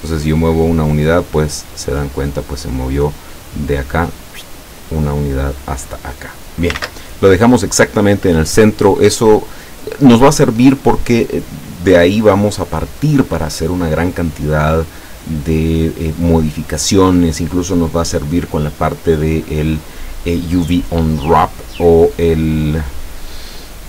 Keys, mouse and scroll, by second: 0.2-1.2 ctrl+drag, 6.8 ctrl+z.